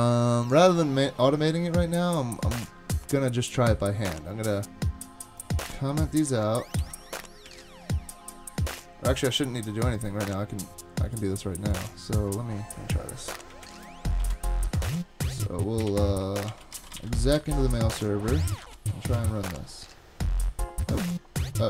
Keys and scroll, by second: 6.8 super+/, 7.5 super+s, 13.6 shift+super+Right, 14.2 super+c, 14.3 super+Tab, 14.7 super+Tab, 15.9 ctrl+c, 16.5-17.5 typing, 18.6 super+v, 19.1 Return.